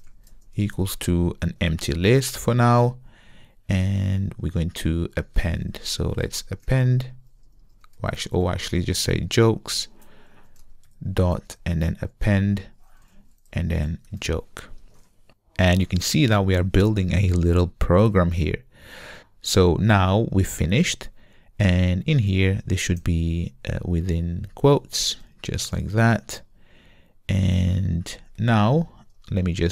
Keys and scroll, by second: 9.7 Return, 11.5 Return.